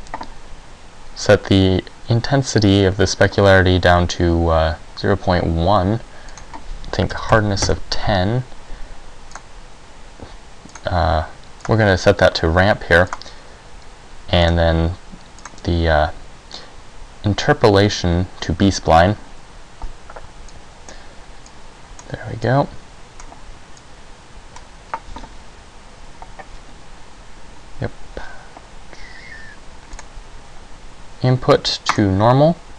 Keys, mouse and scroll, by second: 6.4 click, 9.4 click, 11.8 click, 13.2 click, 15.5 click, 19.0 Escape, 20.6 click, 21.6 click, 22.6 click, 23.9 click, 30.1 click.